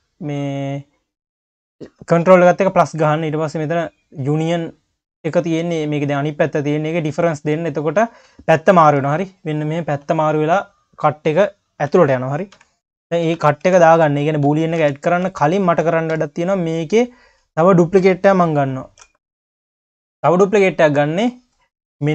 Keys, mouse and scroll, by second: 4.4 scroll down 2, 4.6 q, 5.3 scroll up 2, 5.5 q, 7.0 click, 7.5 q, 9.0 q, 10.1-10.5 scroll down 5, 10.5 q, 12.5 KP_3, 13.3 ctrl+z, 13.7 q, 14.8 ctrl+z, 15.4-16.1 scroll up 1, 16.1 KP_3, 16.7 click, 17.2 scroll down 1, 17.4 q, 18.1-18.8 scroll up 2, 18.8 shift+d, 19.6 q, 20.3 click.